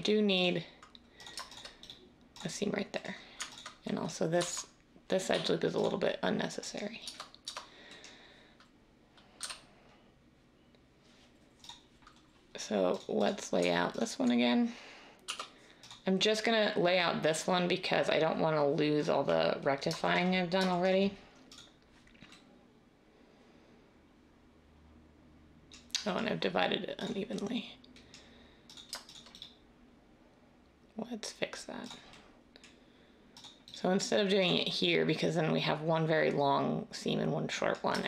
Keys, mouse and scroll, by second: 4.3 x, 5.3 x, 7.0 Tab, 7.4 Tab, 9.3 a, 15.2 u.